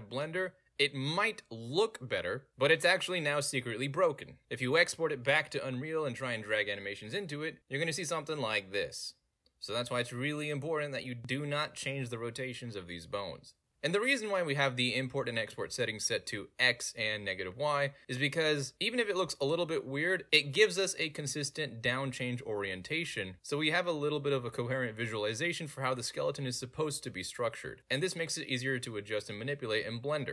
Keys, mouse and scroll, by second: 0.1 middle click, 0.2 middle click, 0.3 middle click, 0.9 click, 1.1 middle click, 1.2 middle click, 4.0 click, 4.6 click, 6.5 click, 6.9 click, 9.5 click, 10.0 right click, 13.8 click, 14.4 click, 16.4 click, 18.0 click, 20.1 click, 20.6 click, 21.0 middle drag, 21.3 middle click, 21.7 middle drag, 22.0-22.4 middle drag, 22.6 middle click, 22.8 middle drag, 24.3 middle drag, 24.5 middle click, 25.2 middle drag, 26.0-26.9 middle drag, 27.2 middle drag, 28.3-28.6 middle drag, 29.3 middle drag.